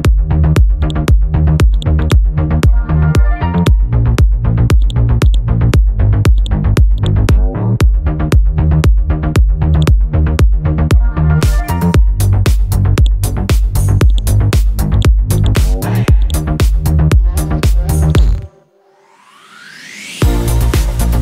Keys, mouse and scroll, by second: 0.8 right click, 1.8 click, 2.8 scroll up 1, 3.6 click, 3.9-4.3 scroll down 1, 4.8-8.6 drag, 11.1 KP_4, 13.0 click, 15.0 right click, 15.4 click, 18.8 scroll up 1, 20.3-21.2 scroll down 1.